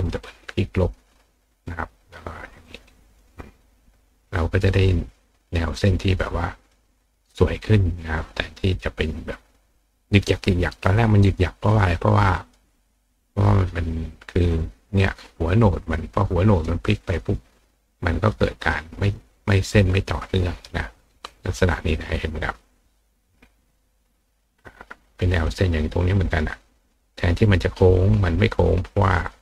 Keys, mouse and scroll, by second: 0.0 click, 0.9 click, 2.4 click, 2.6 click, 3.1 click, 4.7 click, 5.7 click, 6.7 click, 8.3 click, 9.0 click, 9.7 click, 11.0 click, 11.2 click, 11.7 click, 12.4 click, 13.1 click, 14.5-16.6 drag, 17.1-18.3 drag, 18.7 click, 19.6 click, 20.8 click, 23.5 click, 24.5 click, 25.0 click, 25.4 click, 26.7 click, 28.7-29.3 drag.